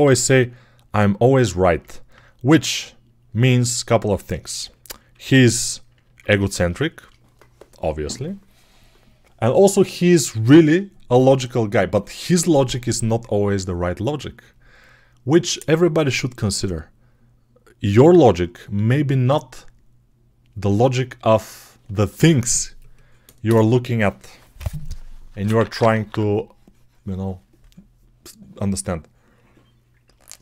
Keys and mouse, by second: 0.1 g, 5.0 1, 6.4-30.4 shift+drag.